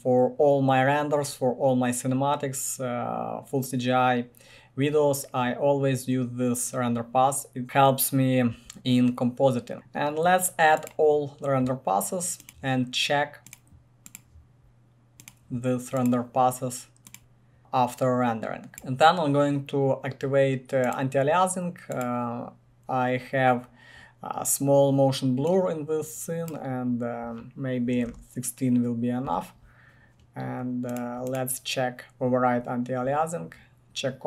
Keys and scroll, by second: 28.0-29.0 typing, 29.2 Return.